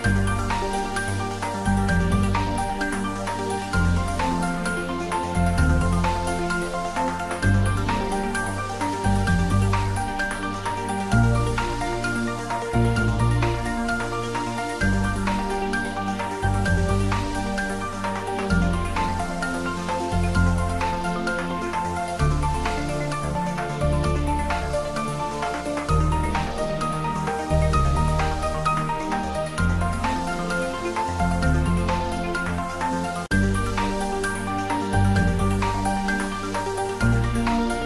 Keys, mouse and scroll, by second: 0.5 scroll up 1, 1.4 Tab, 2.2 a, 4.3 s, 5.2 Tab, 5.5 click, 6.7 Tab, 8.9 Tab, 10.3 Tab, 10.3 s, 10.8 click, 11.7 Tab, 13.3 Tab, 15.0 click, 15.3 Tab, 16.7 a, 17.2 a, 17.3 a, 18.4 a, 18.9 s, 20.2 click, 21.1 Tab, 23.9 Tab, 25.1 s, 26.2 click, 26.9 Tab, 29.4-30.3 scroll down 1, 31.4-32.2 scroll up 1, 32.8 click, 34.2 click.